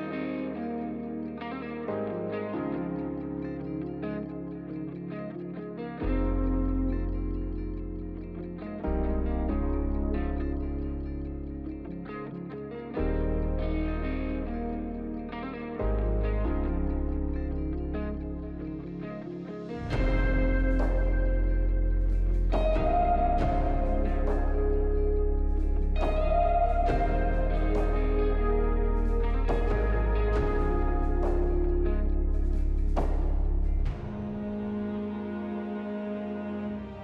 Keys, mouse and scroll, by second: 8.8 w, 11.9 alt+middle click, 13.2 r, 15.6 r, 17.2 w, 17.5 q, 18.1 ctrl+click, 18.7 ctrl+click, 19.4 ctrl+click, 20.6 ctrl+click, 21.0 r, 23.1 alt+middle click, 24.5 double click, 27.3 double click, 30.0 Delete, 33.8 q.